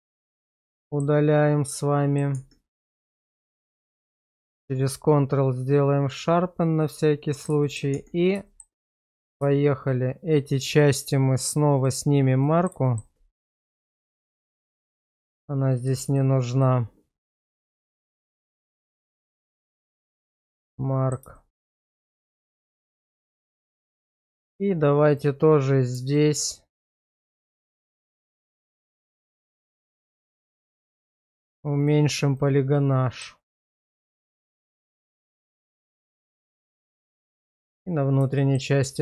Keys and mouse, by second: 0.8 shift+middle click, 1.4 middle click, 2.5 Tab, 2.9 q, 4.3 shift+middle click, 4.8-7.4 middle drag, 7.6 shift+middle click, 8.0 Tab, 8.5 middle click, 9.8 click, 11.1 click, 12.4 middle click, 12.9 middle click, 14.1 shift+click, 14.6 middle click, 14.9 shift+middle click, 16.1 shift+click, 18.4 middle click, 19.0 q, 20.3 shift+middle click, 20.8 middle click, 21.3 shift+middle click, 21.9-23.6 middle drag, 24.1 shift+middle click, 26.5 shift+click, 27.2 middle click, 27.8 shift+middle click, 30.2 middle click, 31.8 shift+click, 32.7 middle click, 34.1 shift+click, 34.5 shift+click, 35.6 ctrl+x, 36.0 middle click, 36.4 middle click, 37.2 middle click, 38.4 shift+middle click.